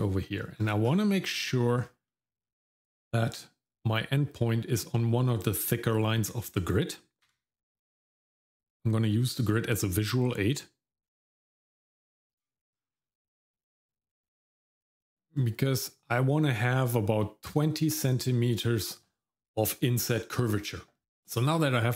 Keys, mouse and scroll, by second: 0.2 middle click, 0.5-1.2 scroll up 2, 1.2 middle click, 1.4-2.1 scroll up 3, 2.1 middle click, 2.4-3.9 scroll up 1, 7.3 g, 12.7-13.8 scroll down 6, 13.8 middle click, 14.2-14.6 scroll up 1, 14.6 middle click, 15.3-15.7 scroll down 1, 15.7 middle click.